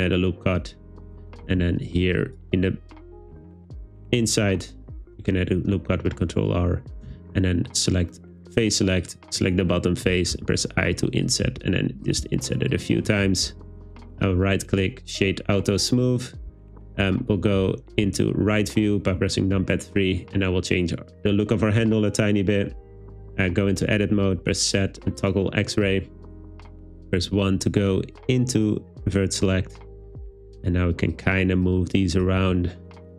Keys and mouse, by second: 1.5 super+r, 2.3 click, 4.2 click, 7.1 3, 9.0 click, 10.4 i, 11.3 click, 11.5 i, 12.1 click, 12.3 i, 12.8 click, 13.5 Tab, 14.3 click, 16.5 `, 18.1 `, 21.8 Tab, 24.5 z, 26.4 1, 27.1 shift+middle click, 30.1 g, 31.2 click, 32.4 g.